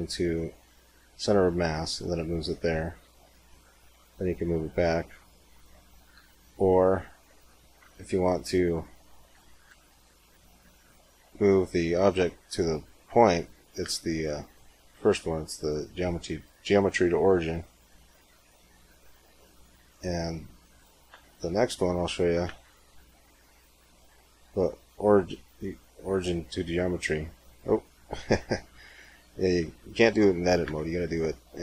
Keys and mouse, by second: 2.9 g, 6.0 Tab, 6.5 g, 7.7 Tab, 9.4 space, 13.7 space, 20.0 g, 21.0 Tab, 21.3 g, 22.3 space, 29.4 Tab, 30.5 space.